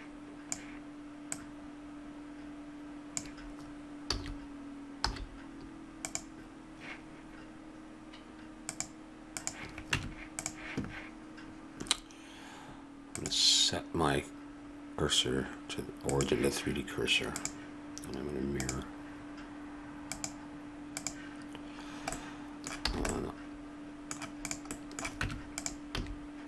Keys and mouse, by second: 1.3-3.1 drag, 4.1 a, 5.0 z, 8.7-11.4 drag, 9.9 Tab, 13.1 click, 21.8 click, 22.1 middle click, 22.8 a, 24.4 right click, 25.2 Tab, 25.9 a.